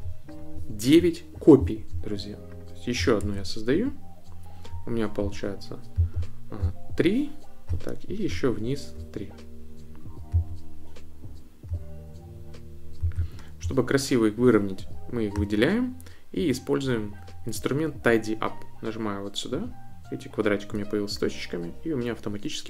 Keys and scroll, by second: 3.2 super+d.